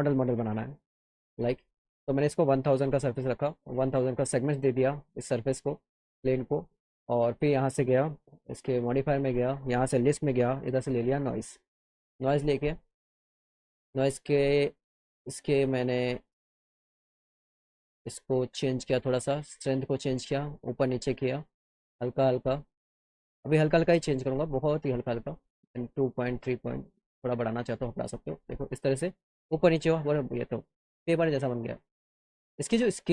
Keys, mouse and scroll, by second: 3.6 click, 4.6 click, 8.2 click, 8.7 click, 9.3 click, 10.5 b, 12.7 click, 16.9 click, 20.1-21.7 drag, 22.9-24.9 drag, 26.0-27.4 drag, 27.9-29.6 alt+middle drag.